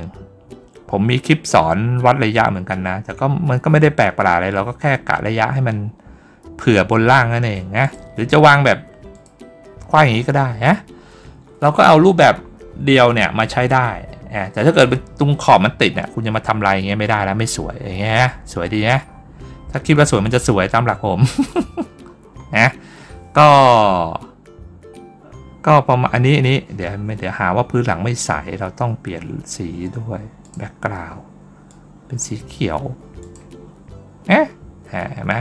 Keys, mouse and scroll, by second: 7.7 click, 9.0 click, 10.5 middle click, 11.6 middle click, 11.9 middle click, 12.2 middle click, 13.3 scroll down 2, 15.7 scroll down 2, 17.1 scroll down 2, 18.7 scroll up 2, 18.9 scroll down 2, 19.5 scroll up 1, 19.8 scroll down 1, 20.7 middle click, 20.7-22.1 scroll down 1, 22.1-22.5 scroll up 1, 26.0 scroll up 1, 26.4 scroll down 1, 30.3 click, 31.5 click, 33.0 click.